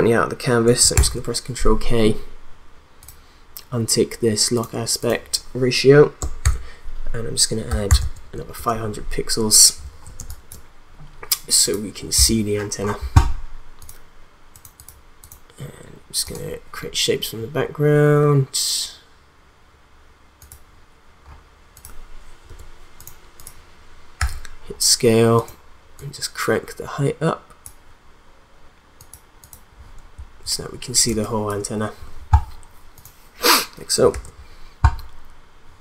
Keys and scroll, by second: 0.9 ctrl+k, 6.4 shift+=, 7.7 5, 8.0 0, 8.5 Return, 10.1 space, 22.5 BackSpace, 24.2 s, 31.1 space, 34.1 ctrl+s.